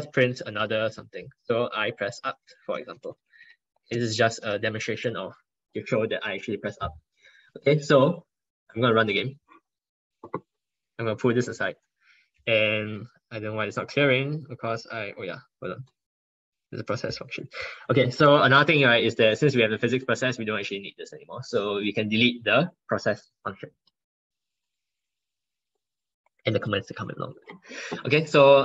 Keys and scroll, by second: 4.9 ctrl+Right.